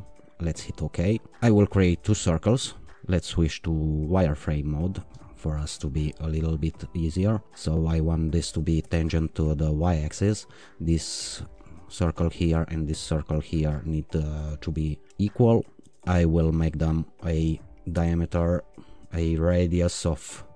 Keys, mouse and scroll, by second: 0.5-2.1 drag, 2.9 click, 2.9 q, 5.1-5.8 scroll up 2, 6.0-6.8 right drag, 7.4 click, 8.3 click, 8.8 o, 10.5 click, 12.3 click, 15.1 e, 16.6 click, 17.9 d, 19.2 r.